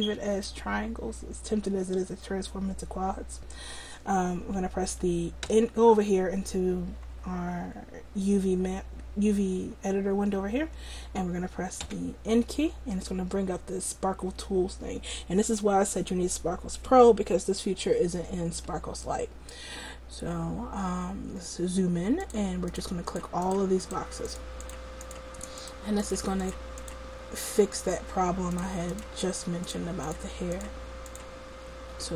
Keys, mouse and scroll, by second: 5.6 n, 6.1 n, 12.0 n, 22.3-32.1 drag.